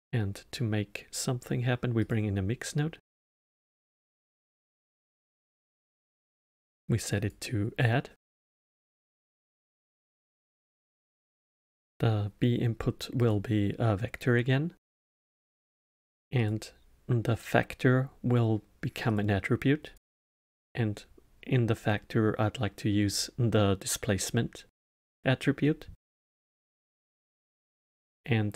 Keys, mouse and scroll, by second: 5.2 click, 7.2-8.2 drag, 10.7-13.7 drag, 16.3-19.3 drag, 19.8-22.9 drag, 27.4-28.5 drag.